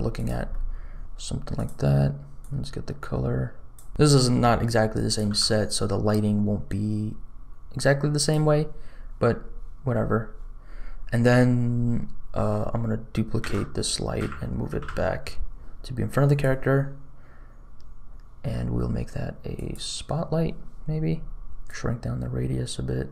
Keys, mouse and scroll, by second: 0.4 middle click, 1.0 g, 1.5 click, 3.9 r, 5.2 g, 13.4 shift+d, 19.5 click, 21.5 s, 21.6-23.1 drag.